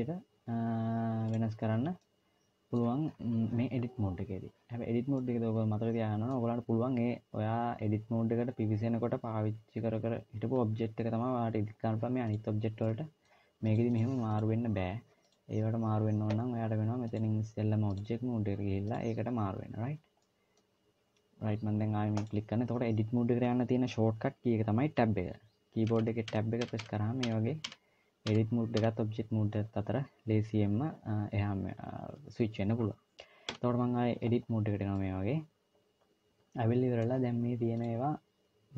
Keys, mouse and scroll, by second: 1.8 middle click, 2.9-4.8 scroll down 1, 4.8 scroll down 1, 5.0 middle click, 12.0 click, 12.6 middle click, 13.4 click, 13.7 click, 15.0 click, 16.9 click, 20.0 middle click, 21.9 click, 25.6 Tab, 26.1 Tab, 26.4 Tab, 26.6 Tab, 27.0 Tab, 27.4 Tab, 28.1 Tab, 28.6 Tab, 31.5 scroll up 1, 33.4 Tab, 34.1-34.8 scroll up 4, 34.8 middle click, 37.6 click.